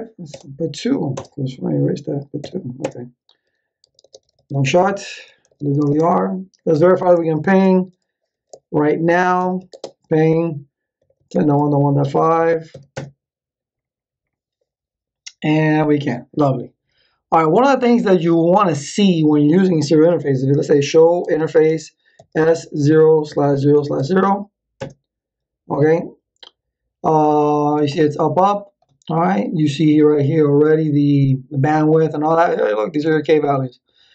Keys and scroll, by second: 0.3 BackSpace, 2.4 2, 2.8 Return, 3.6-6.2 typing, 6.7 ctrl+z, 7.1 Return, 9.0-12.7 typing, 12.9 Return, 20.2-24.4 typing, 24.7 Return.